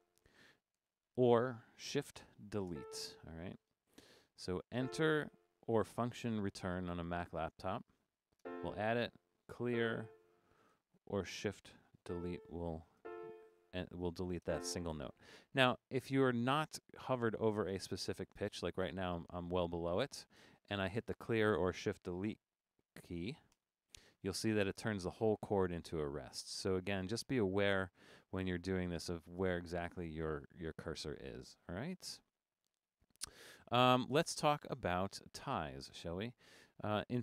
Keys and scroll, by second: 0.2 Up, 0.8 Up, 2.7 shift+BackSpace, 7.6 Down, 7.8 Down, 8.1 Down, 10.2 Up, 10.3 Up, 10.8 Up, 12.0 shift+BackSpace, 13.5 Down, 13.7 Down, 13.9 Down, 15.7 Down, 16.4 Down, 17.8 Down, 18.1 Up, 18.4 Down, 23.5 shift+BackSpace, 24.2 Right, 25.5 Left, 26.7 super+z, 27.8 Up, 28.1 Up, 28.5 Up, 29.1 Up, 29.3 Up, 29.4 Up, 29.5 Up, 29.7 Up, 29.9 Up, 30.0 Up, 30.3 Up, 35.7 Escape.